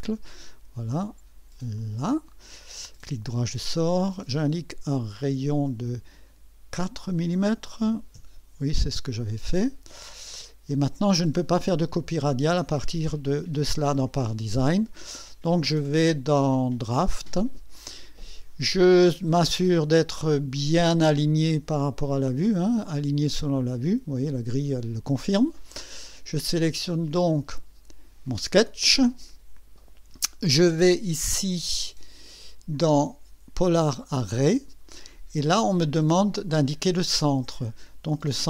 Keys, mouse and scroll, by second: 0.0 click, 1.7 click, 2.7 right click, 5.4 click, 6.8 click, 7.8 KP_4, 8.1 KP_Enter, 11.2 click, 15.3 click, 17.0 click, 20.8 click, 23.4 click, 27.1 click, 32.7 click, 34.0 click.